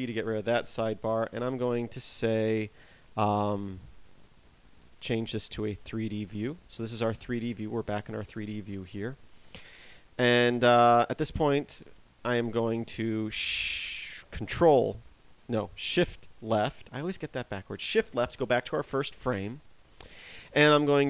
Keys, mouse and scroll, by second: 6.7 click, 7.7 scroll down 2, 8.9 t, 10.4 scroll up 1, 15.5 ctrl+Left, 15.9 ctrl+Right, 16.5 shift+Left.